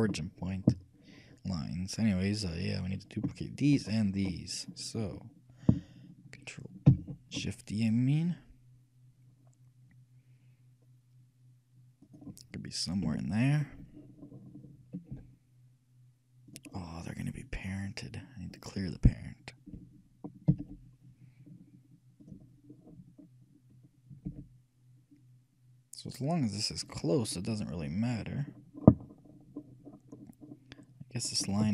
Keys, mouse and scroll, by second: 2.7-5.8 right drag, 7.1 shift+d, 13.2 KP_3, 14.1-16.1 middle drag, 15.3 g, 16.9-19.1 middle drag, 20.7 alt+p, 22.9-25.4 middle drag, 24.5 g, 27.4-28.7 middle drag.